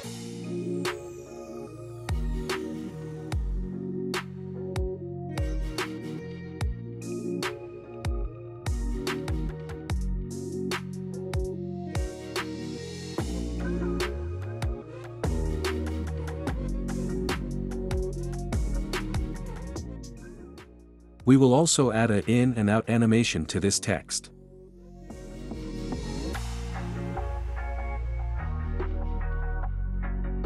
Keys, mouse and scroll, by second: 0.0-1.1 typing, 3.3 click, 4.2 space, 5.7 space, 8.0 click, 10.6-11.6 drag, 12.8 click, 14.7-15.7 drag, 21.2-22.2 drag, 26.0-27.0 drag.